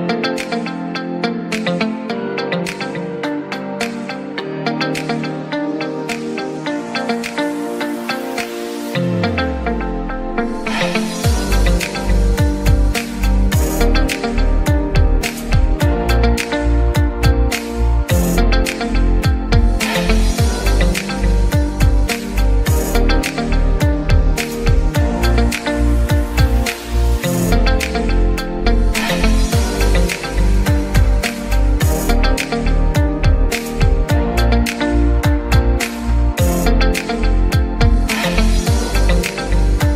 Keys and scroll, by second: 35.5 Escape.